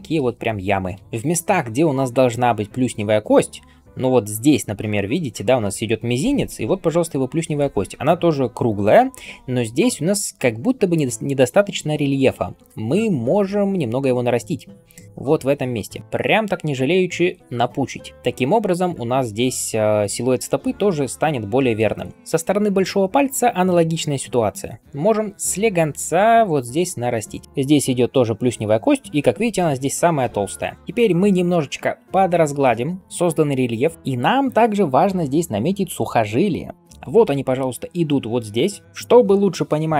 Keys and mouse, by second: 12.0-12.5 ], 12.7 ], 16.0 [, 22.1 ].